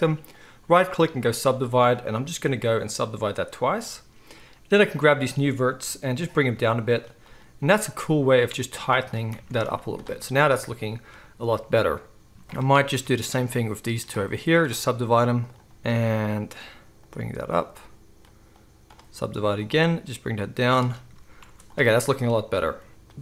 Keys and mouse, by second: 0.4-2.4 right drag, 2.5-5.0 drag, 5.0-7.2 right drag, 5.8 g, 7.2-9.0 drag, 7.6 g, 9.0-13.4 right drag, 9.3 Tab, 9.6 z, 12.9 Tab, 13.4-15.5 middle drag, 15.5-17.5 right drag, 15.9 g, 17.5-20.7 middle drag, 19.7 g, 20.7-23.2 right drag, 21.0 Tab, 21.4 z, 22.9 alt+a, 22.9 KP_1.